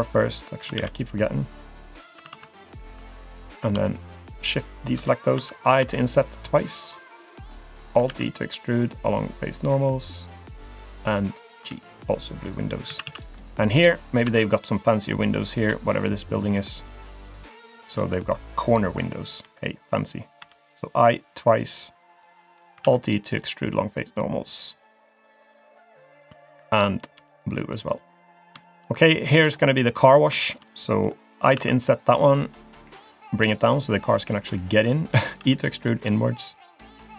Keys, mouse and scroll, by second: 0.8 ctrl+r, 2.1 3, 2.2 3, 2.6 alt+click, 3.3 alt+click, 4.3 shift+click, 4.6 shift+click, 5.4 i, 8.1 alt+e, 11.7 g, 12.5-12.9 scroll down 1, 12.9 a, 13.0 a, 13.5 alt+click, 13.9 middle click, 15.0 shift+click, 15.3 shift+click, 16.3 alt+click, 16.6 shift+click, 16.9 middle click, 18.2 middle click, 18.9-19.4 scroll up 1, 19.4 i, 22.4 middle click, 22.8 alt+e, 27.1 g, 28.1 middle click, 28.6 shift+middle click, 29.3 click, 29.5-30.2 scroll up 2, 30.2 scroll up 1, 30.5 shift+click, 30.7 middle click, 31.1-31.6 scroll up 1, 31.6 i, 34.0 click, 35.4 e, 36.8 middle click.